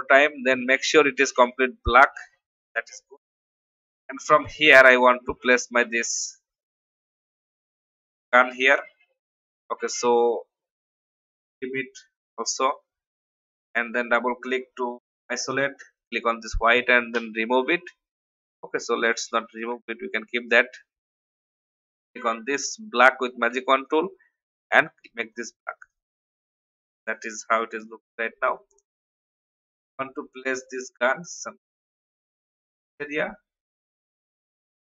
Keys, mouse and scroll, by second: 0.5 click, 3.7 alt+scroll down 1, 4.2-4.9 scroll up 1, 5.2-6.4 drag, 7.0 shift+click, 8.3-8.6 alt+scroll up 1, 12.1 click, 13.8-14.2 alt+scroll up 1, 14.6 scroll down 1, 15.3-15.9 scroll down 1, 15.9 click, 17.1 Delete, 18.1 alt+scroll down 1, 19.5 ctrl+z, 20.2 v, 21.4 y, 21.9 click, 23.5 v, 23.8 click, 26.4 alt+scroll down 1, 26.8-32.2 drag, 32.6 shift+click.